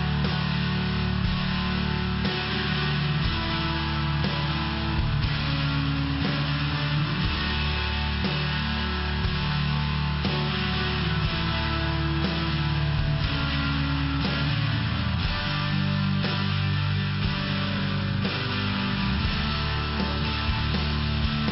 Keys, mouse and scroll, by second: 0.5 click, 3.9 click, 4.5 click, 7.4 click, 8.1 click, 8.9 click, 9.5 click, 10.6 click, 11.4 click, 12.3 click, 13.5 click, 15.5 click, 17.3 click, 18.8 click, 18.9 click.